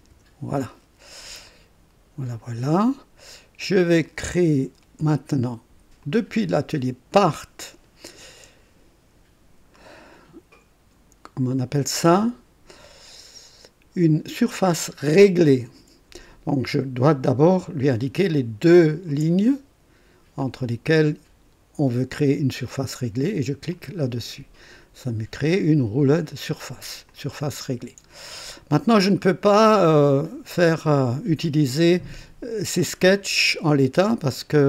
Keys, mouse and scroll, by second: 0.0-0.1 typing, 1.4 click, 7.3 click, 18.7 ctrl+click, 20.4-22.3 drag, 23.7 click, 27.1-29.0 drag, 29.1-32.2 drag, 33.0-34.6 drag.